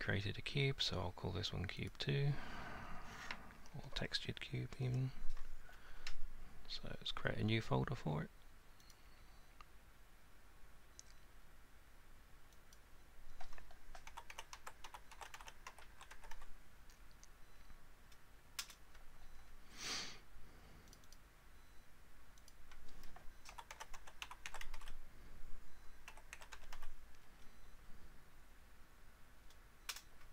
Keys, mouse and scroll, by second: 1.9 click, 8.9 click, 12.7 click, 14.1-16.4 typing, 15.2-17.9 drag, 18.6 Return, 21.0 click, 21.1 click, 22.5 click, 23.5-24.8 typing, 25.9-26.8 typing, 29.9 Return.